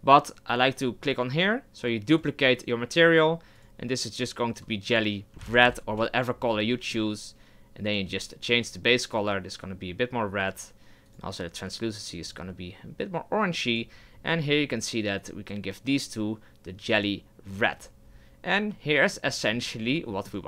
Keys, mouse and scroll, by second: 12.3 click, 14.5 right click, 17.0-17.5 drag, 17.5 right click, 17.7-18.7 scroll down 7, 19.3-19.7 shift+middle drag, 19.7-20.1 scroll up 1, 20.1-20.4 shift+middle drag.